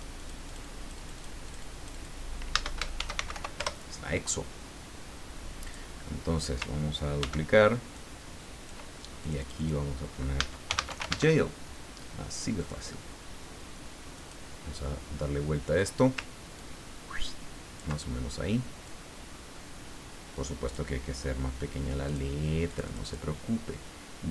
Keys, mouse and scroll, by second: 1.5 click, 2.7-3.8 typing, 5.6 click, 7.2 ctrl+d, 7.9 ctrl+click, 9.2 ctrl+click, 10.5-11.4 typing, 12.6 click, 14.1 click, 15.7 click, 16.5-17.7 ctrl+drag, 18.8-20.9 drag, 22.1 click, 22.7 click.